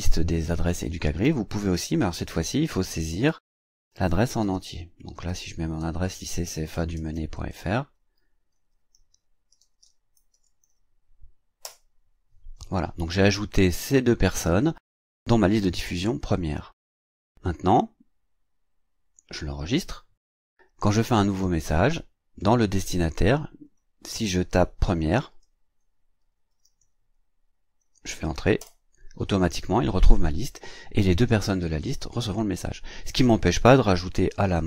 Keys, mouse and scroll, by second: 0.8-11.2 typing, 5.8 alt+l, 11.6 Return, 17.1 click, 19.1 click, 21.4 click, 23.6 click, 24.8-26.7 typing, 27.8 e, 28.6 Return, 33.9-34.6 typing.